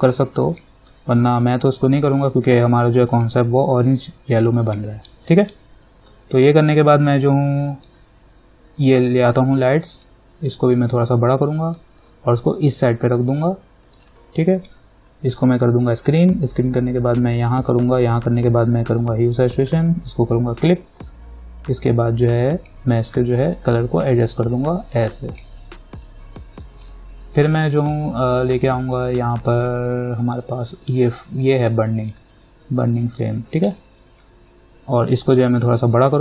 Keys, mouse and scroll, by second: 0.7 click, 4.7-11.1 drag, 11.5-12.5 alt+drag, 12.8 click, 13.7 click, 21.6-25.5 drag, 31.0-33.9 drag, 35.6-36.2 alt+drag.